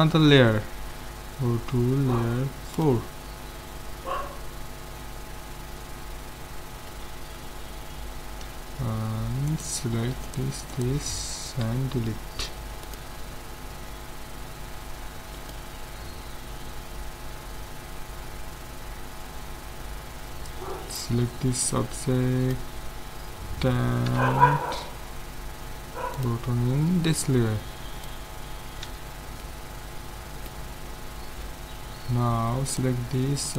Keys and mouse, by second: 0.9 m, 6.9 z, 8.4 z, 9.5-12.3 right drag, 11.6 x, 15.4-17.2 drag, 21.0 b, 24.1 m, 28.0-29.8 drag, 28.9 z, 31.5 z, 32.7-33.5 right drag.